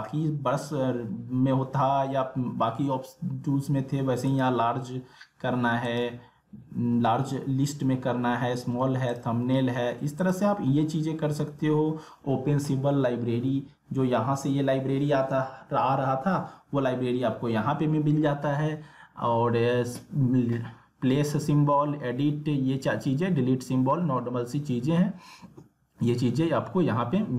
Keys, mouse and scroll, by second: 4.3 click, 9.1 click.